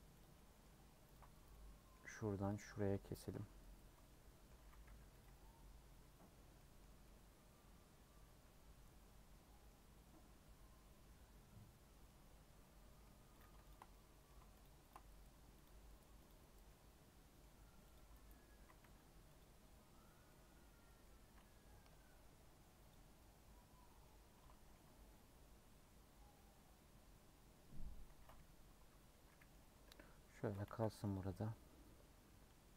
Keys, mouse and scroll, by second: 0.2 click, 0.3 middle click, 1.1 ctrl+click, 1.5 middle click, 2.4 click, 2.6 middle click, 3.2 ctrl+click, 4.0 middle click, 4.6 a, 5.2 u, 7.0-9.7 middle drag, 9.7 scroll up 2, 12.0-13.4 middle drag, 13.4 click, 13.9 middle click, 14.6 shift+click, 15.6 click, 16.2 click, 16.7-17.9 middle drag, 17.9 click, 18.5 a, 19.4 u, 20.2 middle click, 21.0-22.1 scroll down 1, 22.2 middle click, 22.9 click, 23.2-24.7 middle drag, 24.7 a, 26.3-29.8 middle drag, 29.8 /, 30.3 Tab, 30.6 h, 31.1 click, 32.6-32.7 middle drag.